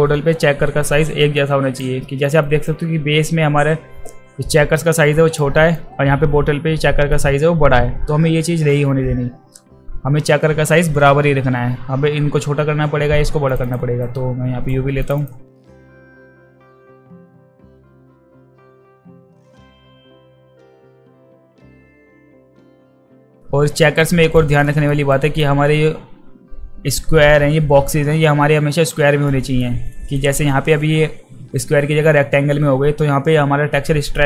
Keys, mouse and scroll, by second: 1.3-1.8 alt+drag, 2.0 alt+middle drag, 2.4 alt+right drag, 5.4-5.8 alt+drag, 6.8 alt+middle drag, 13.6 click, 14.0-14.7 right drag, 15.0 click, 15.2 click, 15.6 shift+click, 16.0 r, 16.5-17.2 middle drag, 17.3 drag, 17.6 e, 17.7 middle click, 17.9 ctrl+z, 18.0 middle click, 19.5 w, 19.6 click, 20.0 click, 20.1 click, 20.3 shift+click, 20.5 click, 20.8-21.5 middle drag, 21.5 alt+drag, 21.9 middle click, 22.2 alt+click, 22.3 alt+right click, 22.4 alt+middle click, 22.4 alt+click, 22.5 alt+middle click, 22.5 alt+click, 22.6 alt+right click, 22.7 alt+right click, 22.8 alt+click, 22.9 alt+right click, 23.0 alt+right click, 23.1 alt+middle click, 23.2 alt+click, 23.2 alt+middle drag, 23.3 alt+drag, 23.4-23.7 alt+middle drag, 24.0-24.4 alt+right drag, 24.7 alt+middle drag, 25.1 alt+right drag, 29.3 alt+middle drag, 29.9 alt+middle drag.